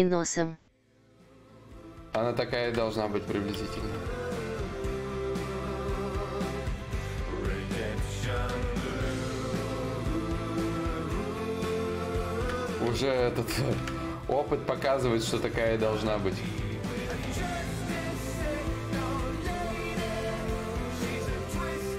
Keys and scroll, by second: 2.9-4.4 typing, 5.8 ctrl+z, 6.3 s, 8.2 ctrl+z, 9.5 s, 10.3 d.